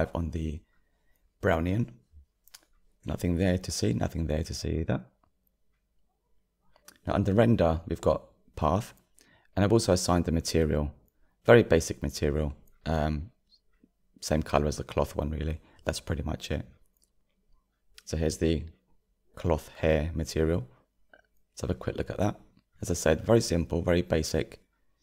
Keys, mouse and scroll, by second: 16.2-18.0 drag, 19.9 click, 22.2 click.